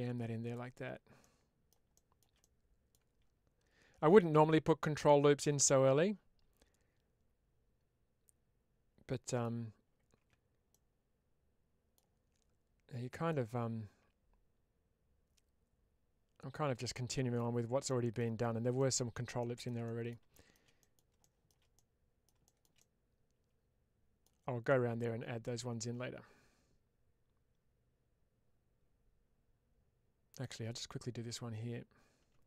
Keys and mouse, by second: 0.3 click, 1.1 middle click, 2.3 middle click, 5.2-9.3 middle drag, 10.2 Tab, 10.6-11.8 middle drag, 13.2-17.2 middle drag, 17.7 middle click, 18.6 middle click, 19.7 middle click, 20.7 middle click, 21.6 middle click, 24.0 middle click, 24.5-30.3 middle drag.